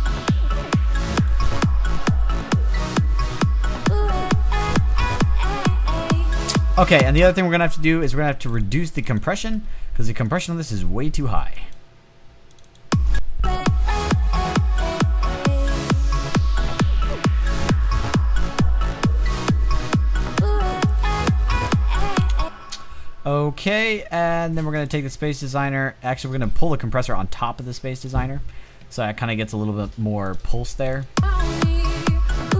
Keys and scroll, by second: 6.4 space, 21.5 space.